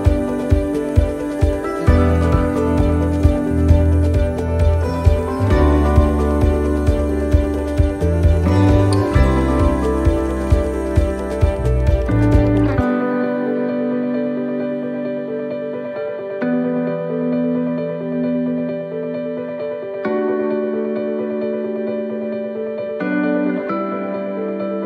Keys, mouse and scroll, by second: 0.4 click, 0.4 scroll up 2, 2.0-2.5 scroll down 4, 2.4 middle click, 3.2 middle click, 3.6-4.1 scroll up 2, 6.2 click, 6.2 shift+scroll up 1, 9.7 right click, 9.7 shift+d, 10.2 click, 12.2 right click, 13.1 shift+d, 14.4 click, 16.5 shift+middle click, 17.3 scroll up 5, 17.7 shift+middle click, 19.7 click, 22.8 click, 24.2 shift+middle click, 24.4 shift+scroll down 2.